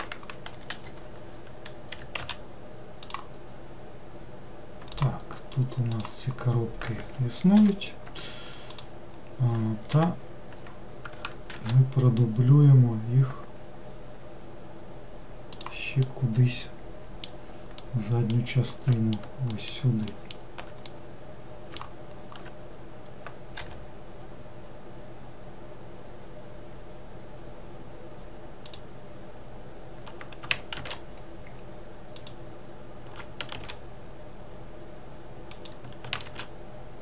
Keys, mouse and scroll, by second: 2.0 r, 3.5-5.0 scroll down 1, 5.0 click, 6.0 click, 6.6-7.6 scroll down 1, 7.6 l, 8.8 click, 10.0 l, 11.6 shift+d, 16.1-19.1 middle drag, 19.6 alt+middle click, 20.2 alt+middle click, 21.0-23.7 middle drag, 23.7 g, 30.9 shift+d, 33.6 shift+d, 36.4 shift+d.